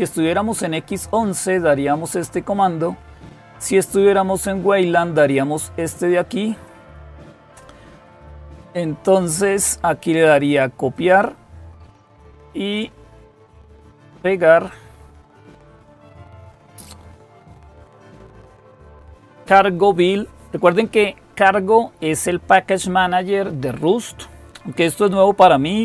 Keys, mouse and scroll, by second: 6.5-8.3 drag, 9.2-10.9 drag, 13.0 click, 14.3 right click, 15.8 click.